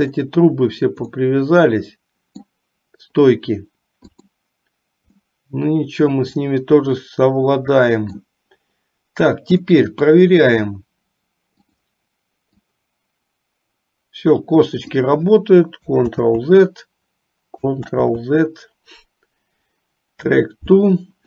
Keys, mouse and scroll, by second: 1.3-2.5 middle drag, 4.3 click, 5.4-8.4 middle drag, 9.8 middle click, 11.6 click, 12.8-15.2 drag, 16.2 ctrl+z, 17.9 ctrl+z.